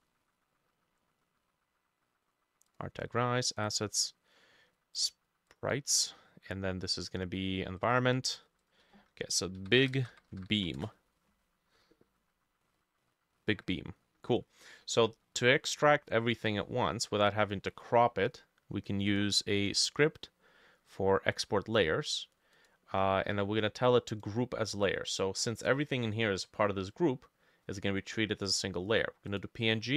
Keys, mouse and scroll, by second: 3.7-7.7 drag, 8.0-9.6 drag, 9.4-11.0 typing, 16.1 scroll up 1, 16.7 middle click, 17.7-19.7 drag, 17.7 middle click.